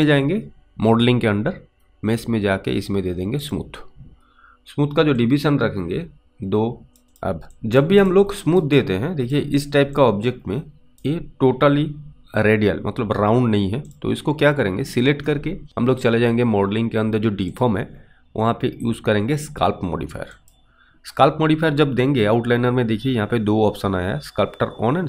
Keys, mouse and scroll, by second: 0.0 click, 5.4 click, 7.0 alt+click, 7.9 alt+click, 8.0 click, 8.7 alt+right click, 9.1 alt+click, 9.6 click, 10.3 click, 13.9 click, 17.5 click.